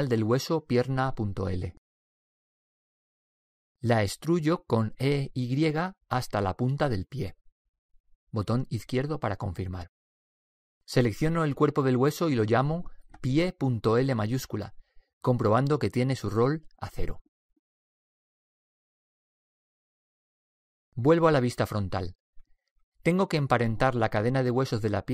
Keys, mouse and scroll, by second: 0.9 right click, 5.3 e, 11.9 right click, 13.4-15.1 drag, 22.4 KP_1, 24.3 click.